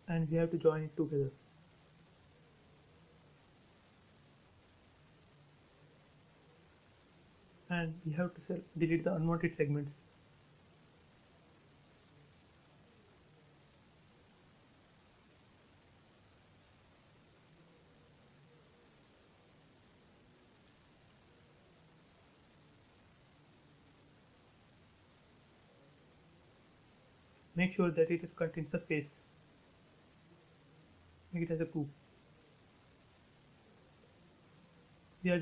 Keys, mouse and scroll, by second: 0.0 shift+middle click, 1.3-1.7 scroll up 1, 3.3 m, 4.2 click, 5.2 space, 5.7-7.4 shift+middle drag, 7.4-7.8 scroll up 1, 9.0 shift+middle click, 9.8 scroll up 1, 11.9 e, 12.1 click, 12.1-14.7 drag, 16.7 click, 17.3 space, 17.4 scroll down 1, 18.8 shift+middle click, 19.0-19.4 shift+scroll down 1, 19.4-19.8 scroll up 1, 20.0 e, 20.3 click, 22.3 space, 22.7 shift+middle click, 23.2 scroll up 1, 23.4 e, 23.7 click, 24.6 click, 25.2 space, 25.6 click, 25.8 scroll down 1, 27.8 shift+middle click, 28.4-28.8 scroll up 1, 29.5 click, 29.8 right click, 30.8 click, 32.2-34.2 middle drag, 34.2 p, 34.4 click.